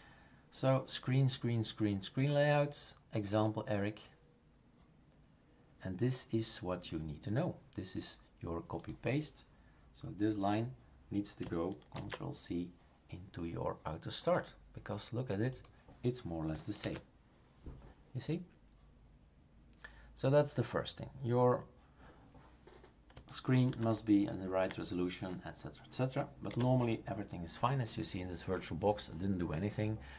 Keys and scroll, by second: 11.9 ctrl+c, 16.8 ctrl+v, 23.7 ctrl+z, 26.5 Delete.